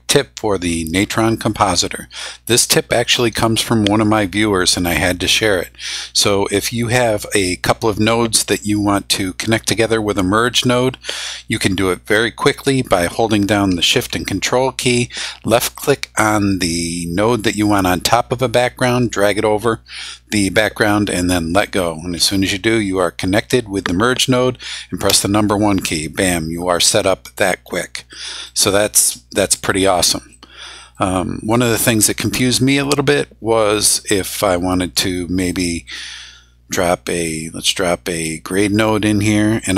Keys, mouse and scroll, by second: 15.7-21.5 ctrl+shift+drag, 25.1 1, 26.8 click, 28.1 click, 29.1 click, 30.3 click, 35.4 click, 35.8 right click, 38.5 click, 39.6-39.7 drag.